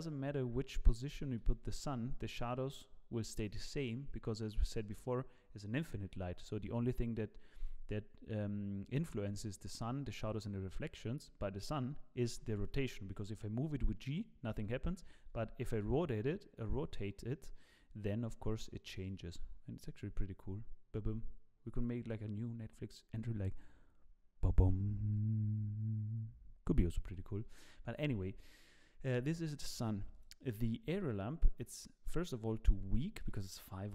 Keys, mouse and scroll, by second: 0.0 click, 1.4 g, 29.8 click, 30.1 click, 31.9 click.